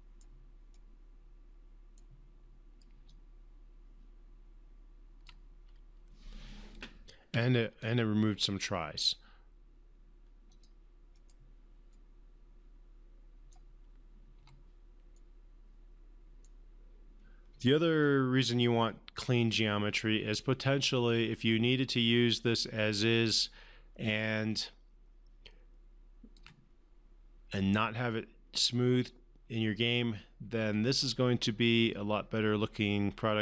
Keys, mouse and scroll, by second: 3.4-5.6 alt+drag, 7.6 1, 10.9 click, 11.5-14.1 right drag, 14.7 1, 15.5-17.0 right drag, 18.4-26.8 alt+drag, 31.1-33.4 alt+drag.